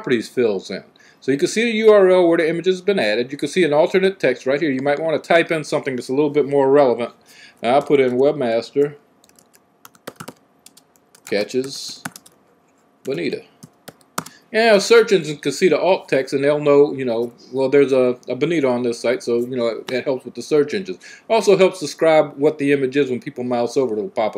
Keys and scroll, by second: 7.7 typing, 8.8-14.4 typing.